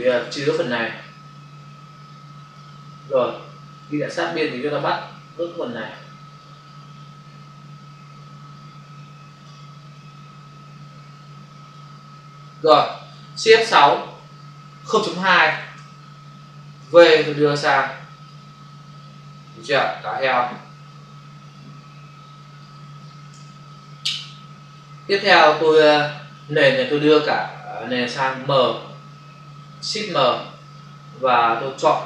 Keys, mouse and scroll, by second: 1.0 alt+click, 3.6 click, 5.3 click, 6.4 click, 10.0 click, 13.9 shift+F6, 15.1 typing, 15.7 Return, 16.7 v, 17.1 click, 20.1 click, 20.3 click, 22.2 space, 23.6 ctrl+d, 25.3 space, 25.8 ctrl+click, 31.4 click.